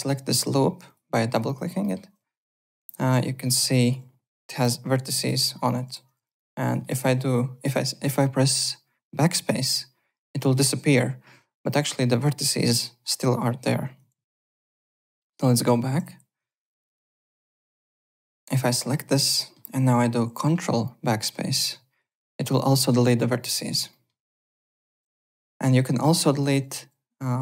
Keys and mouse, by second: 0.8 alt+click, 1.3 click, 1.8 alt+middle click, 2.9 alt+right click, 3.1 alt+click, 4.6 1, 5.2 click, 5.7-6.6 typing, 6.2 click, 6.6 alt+right click, 6.8 alt+middle click, 9.7 BackSpace, 11.3 1, 11.7 alt+middle click, 12.7 click, 13.3 click, 14.1 ctrl+z, 15.5 ctrl+z, 16.3-17.3 typing, 17.2 click, 17.7 alt+click, 19.3 alt+middle click, 21.5 ctrl+BackSpace, 22.5 click, 23.9 alt+middle click, 24.2 alt+right click, 24.3 alt+click, 24.9 1, 25.1 alt+click, 26.1 alt+middle click, 26.3 alt+right click, 26.5 w, 26.8 3.